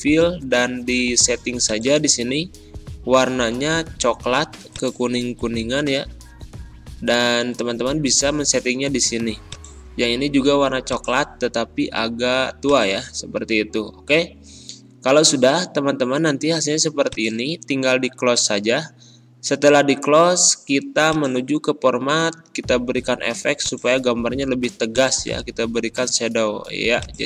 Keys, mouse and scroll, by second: 1.6 click, 4.6 click, 4.6 typing, 9.4 click, 17.0-20.6 drag, 21.0 click, 23.5 click.